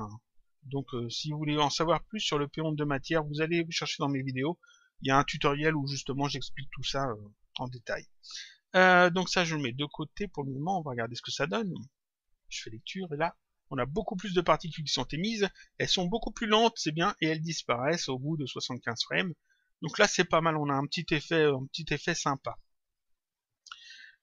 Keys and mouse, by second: 1.0 click, 9.3 click, 11.8 click, 18.6 click, 21.8 click, 23.2 click.